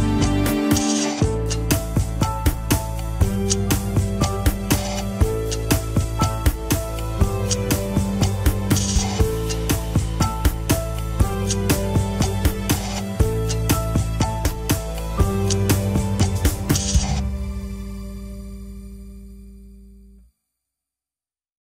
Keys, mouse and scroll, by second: 0.3 alt+z, 0.4-1.4 middle drag, 1.4-2.9 drag, 2.9-4.0 middle drag, 4.0 click, 4.4 KP_1, 4.5 scroll down 4, 4.7 ctrl+Tab, 5.4 ctrl+s, 5.5 click, 6.0 shift+middle drag, 6.1 scroll down 1, 6.7 ctrl+Tab, 7.1 a, 7.8 alt+g, 7.8 shift+middle click, 8.2 click, 9.0 scroll up 1, 9.3 alt+z, 9.8 r, 13.3 ctrl+Tab, 13.4 click, 14.3-15.5 middle drag, 15.5 scroll down 1, 15.7-16.2 middle drag, 16.2 click, 16.5-17.0 middle drag, 17.0 scroll down 1, 17.3 drag, 17.6-19.4 middle drag, 19.4-20.0 scroll up 1, 20.0-20.3 scroll up 1, 20.3 shift+click, 20.7 ctrl+Tab.